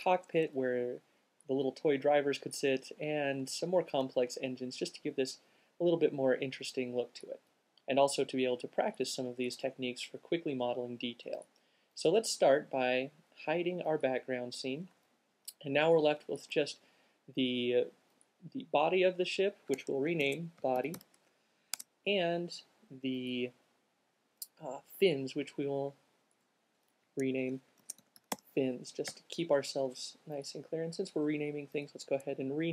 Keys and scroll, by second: 20.2-21.7 typing, 21.9 shift+Tab, 27.8-29.1 typing.